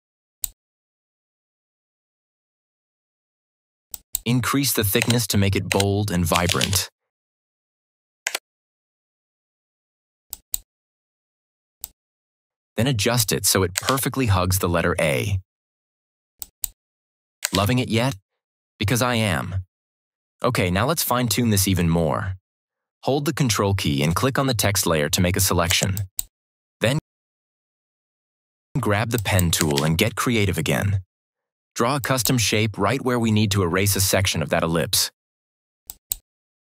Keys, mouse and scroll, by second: 3.8 shift+click, 4.9 BackSpace, 6.0-7.0 typing, 8.2 Return, 10.2-13.3 drag, 13.8 ctrl+=, 16.3 click, 17.3 ctrl+d, 17.4 ctrl+=, 25.6 ctrl+=, 25.8 ctrl+click, 29.1 click, 29.7 ctrl+=, 31.9 click, 35.8 click.